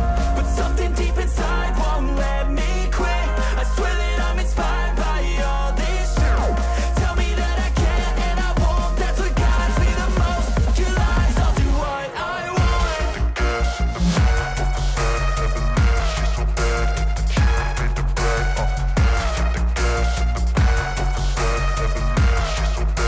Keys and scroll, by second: 8.9 ctrl+Page_Up, 19.9 e.